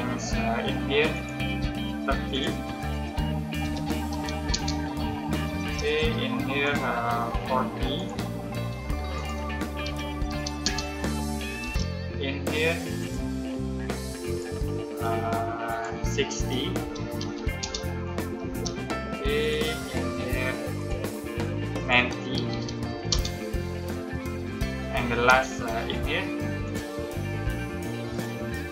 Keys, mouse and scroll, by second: 3.5-4.0 typing, 4.4 Return, 5.5 space, 6.5 click, 9.7-10.2 typing, 10.5 Return, 11.5 space, 12.9 click, 16.7-17.1 typing, 17.5 Return, 18.4 space, 19.3 click, 22.0-22.9 typing, 23.0 Return, 25.2 space, 26.5 click.